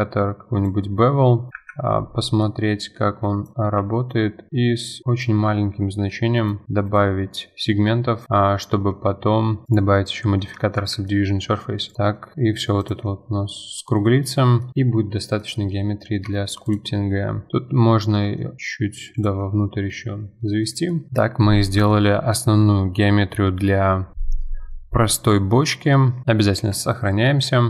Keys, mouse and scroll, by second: 1.2-1.5 scroll up 2, 1.5 middle click, 1.5 F4, 1.8-2.2 scroll up 2, 2.2-3.2 middle drag, 3.2-6.1 drag, 6.4-7.7 drag, 7.7-8.2 middle drag, 8.2 click, 8.6 Tab, 9.6-10.8 drag, 10.8 F4, 11.1-11.5 middle drag, 11.5-11.9 scroll down 1, 11.9 click, 12.1 middle drag, 12.4-12.8 scroll down 1, 12.8 click, 13.1-13.6 middle drag, 13.6-14.1 scroll down 5, 14.1-14.7 middle drag, 14.7 scroll down 1, 14.7-15.6 middle drag, 15.6-16.1 scroll up 9, 16.1-16.7 middle drag, 16.7 click, 16.9 scroll up 2, 17.6-18.1 middle drag, 18.1 g, 19.2 click, 19.4-20.0 scroll down 4, 19.7 middle drag, 20.6 click, 20.9 middle click, 21.1-22.3 middle drag, 22.3-24.1 scroll up 2, 24.7-26.3 middle drag.